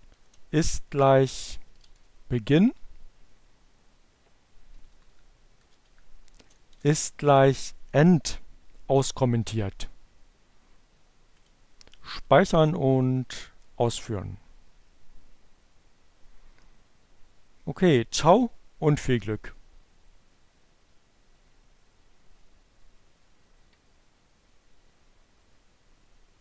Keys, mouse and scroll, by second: 0.0-1.5 typing, 2.1 Down, 4.6 Return, 5.3 Up, 5.9-7.0 typing, 10.6 click, 11.7 click, 12.4 Up, 12.7 Return.